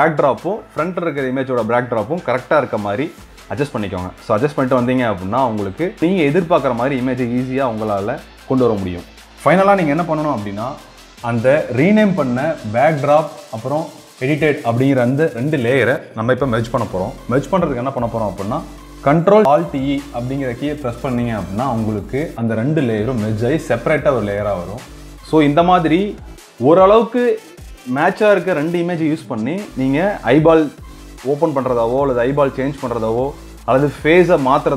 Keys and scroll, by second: 7.1 ctrl+space, 9.1 ctrl+space, 21.2 ctrl+alt+e, 25.4 ctrl+space, 30.3 ctrl+d, 34.6 ctrl+space.